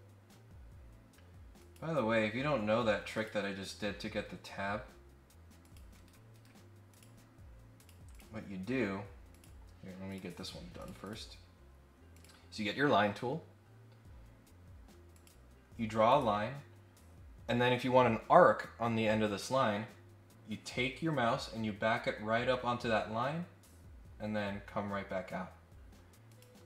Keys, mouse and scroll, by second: 1.5 click, 3.1 click, 5.6 click, 5.9 Escape, 6.3 Escape, 6.9 click, 7.7 click, 8.1 click, 9.3 click, 10.1 click, 10.8 click, 11.0 click, 12.1 click, 14.1-14.5 scroll down 1, 15.1 click, 16.1 click, 26.3 click.